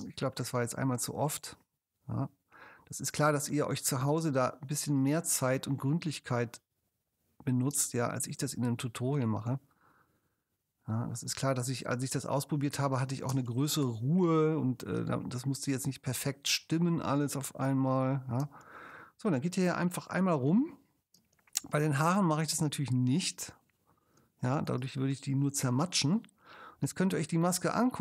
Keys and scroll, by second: 0.0 space, 7.8 space, 8.5 ctrl+alt+space, 13.3 space, 18.4 space, 21.2 space, 24.2 space.